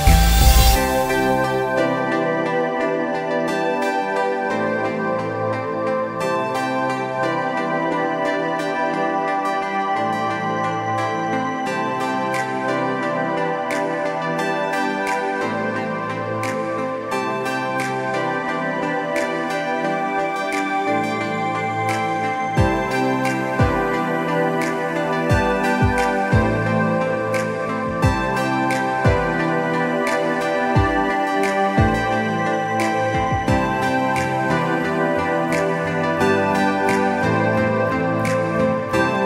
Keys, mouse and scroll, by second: 0.1 click, 1.0-1.4 scroll up 1, 1.5 click, 1.9 scroll down 1, 2.3 click, 2.8 alt+scroll up 1, 2.9 click, 3.2 shift+click, 3.9 shift+scroll up 1, 4.1 shift+space, 4.3 shift+click, 5.0 alt+shift+scroll down 2, 5.4 shift+scroll up 1, 5.7 shift+click, 6.0 shift+scroll down 1, 6.1 space, 6.2 click, 6.7 scroll down 1, 7.0 alt+scroll up 1, 7.1 scroll down 1, 7.2 click, 8.0 scroll down 1, 8.2 click, 8.5 scroll up 1, 8.7 click, 9.1 shift+click, 9.8 click, 10.0 alt+scroll up 2, 10.4 click, 11.0 z, 11.2 click, 11.6 scroll up 1, 11.8 click, 12.6 scroll down 1, 12.8 click, 13.6 scroll down 1, 13.8 click, 14.3-15.4 scroll up 3, 14.5 click, 14.9 click, 15.4 click, 15.7 scroll down 2, 16.1 click, 16.2-17.2 alt+scroll up 2, 16.4 click, 17.2 click, 17.5-19.2 scroll down 5, 17.6 click, 18.0 click, 18.4 click, 18.9 click, 19.2 click, 20.0 alt+scroll up 2, 20.4 click, 21.0 scroll down 1, 21.1 space, 21.4 click, 22.3 click, 22.6 scroll up 1, 22.7 click, 23.4 click, 23.6 alt+scroll down 1, 23.7 space, 23.9 click, 25.4 click, 25.7 space, 25.8 alt+scroll up 1, 26.0 click, 26.5 scroll up 1, 26.7 click, 27.6 alt+scroll down 2, 28.0 click, 28.4-28.9 alt+scroll up 2, 28.7 click, 29.0 alt+scroll down 1, 29.1 click, 29.6 click, 30.1 Delete, 30.4 scroll up 1, 30.7-31.1 scroll down 2, 31.1 scroll up 1, 31.2 space, 31.6 click, 31.7 Delete, 31.8 scroll down 1, 32.0 click, 32.6 click, 32.9 click, 33.1 Up, 33.2 click, 33.7 click, 33.8 Down, 34.0 click, 34.1 Down, 34.2 click, 34.3 Left, 34.4 click, 34.5 Left, 34.6 click, 34.7 alt+scroll down 1, 34.9 scroll up 1, 35.1 click, 35.2 Right, 35.5 alt+scroll down 1, 35.9 alt+scroll up 1, 36.1 scroll down 1, 36.2 click, 36.8 click, 37.2 click, 37.4-38.0 scroll up 2, 38.2 click, 38.5 scroll up 1, 38.7 click, 38.9 click.